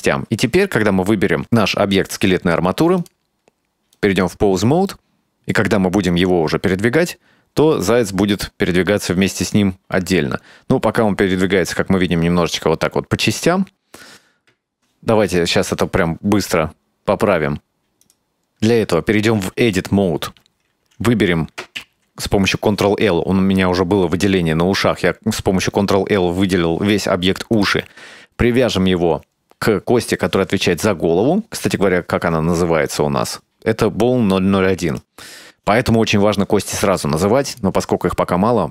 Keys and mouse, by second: 3.2-4.2 drag, 5.0-5.7 middle drag, 6.2-11.2 right drag, 15.1 drag, 16.1-17.9 middle drag, 18.1 right click, 18.7 Tab, 21.9 ctrl+l, 22.0 ctrl+l, 31.0 Tab, 31.7 right click, 32.4 Tab, 33.0 right click, 34.5 Tab, 35.0 right click, 37.6 click.